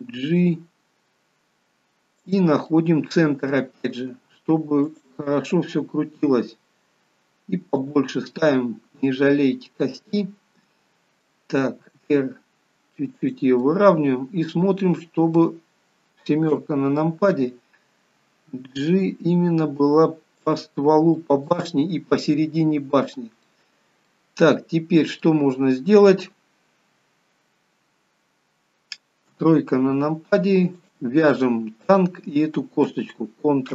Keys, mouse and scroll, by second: 2.7 middle click, 2.7 g, 4.2 g, 8.1 middle click, 8.1 s, 13.7 middle click, 13.7 r, 16.5 KP_7, 18.9 g, 21.2 middle click, 22.4 middle click, 29.3 KP_3, 30.8 click, 31.9 shift+click.